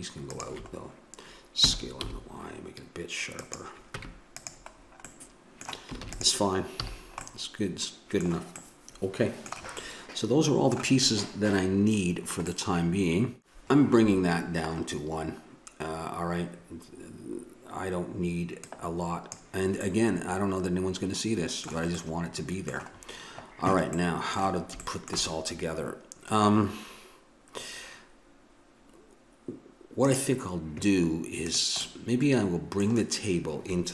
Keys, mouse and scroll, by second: 1.6 s, 4.0 Tab, 4.8 middle click, 6.0 ctrl+s, 6.8 a, 18.6-19.8 drag, 19.8-28.6 middle drag, 30.0-31.8 drag, 31.8-33.4 middle drag.